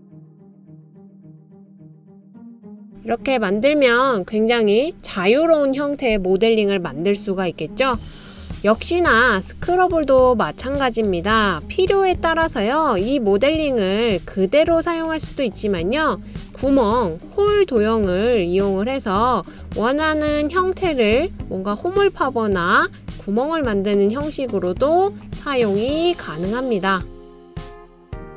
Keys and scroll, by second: 3.0 BackSpace, 12.1 super+c, 12.5 super+v.